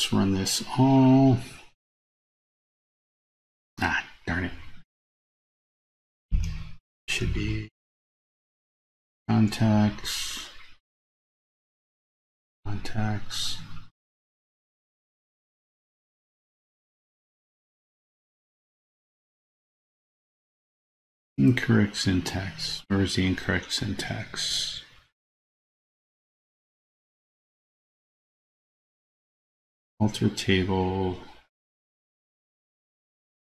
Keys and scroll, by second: 1.4 super+a.